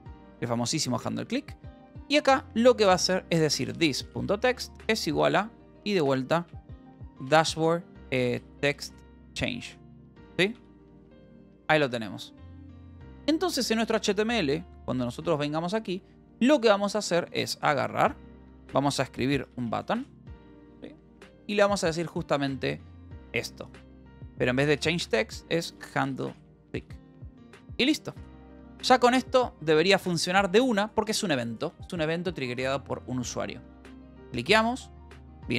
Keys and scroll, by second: 0.0-0.2 typing, 1.3 ctrl+g, 3.1-5.2 typing, 6.4-11.6 typing, 10.1 ctrl+s, 10.5 Right, 11.8 ctrl+s, 15.5 shift+h, 16.9 k, 17.7 o, 19.2-20.5 typing, 22.4 ctrl+s, 22.7 h, 24.5-27.2 typing, 27.5 ctrl+s, 28.7 ctrl+s.